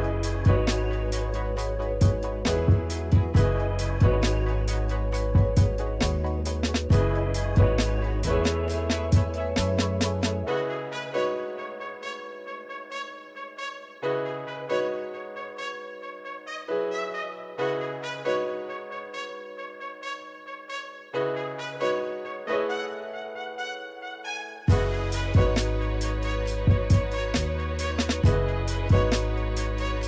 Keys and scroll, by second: 0.0-1.6 typing, 2.8-5.7 typing, 8.1 space, 8.8 space, 9.0 space, 10.6 space, 10.8 space, 11.9 space, 12.6 space, 13.4 space, 13.8 space, 16.4-17.8 typing, 19.0 s, 20.5 space, 21.1 space, 21.6 space, 23.3 s, 24.0 space, 24.5 space, 24.9 space, 27.8 space, 27.9 s, 28.9 s.